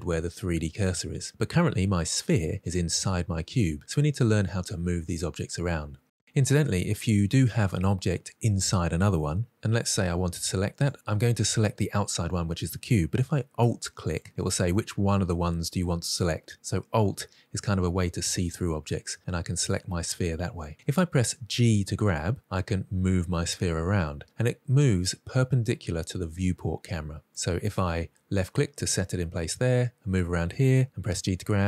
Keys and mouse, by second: 10.9 click, 13.8 alt+click, 21.3 g, 27.2 click, 29.4-30.4 middle drag, 31.0 g.